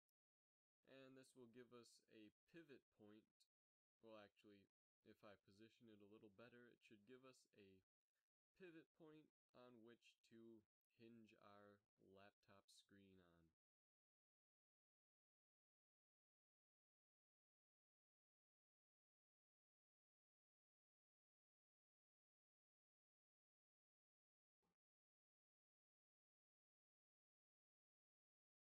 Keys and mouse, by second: 2.2 Tab, 2.6 g, 5.1 r, 6.5 Tab, 7.1 g, 9.8 Tab, 10.2 g, 11.6 r, 13.8 g, 14.4 r, 18.1 r, 20.7 g, 22.5 r, 23.9 a, 26.6-27.3 drag, 28.4 Tab.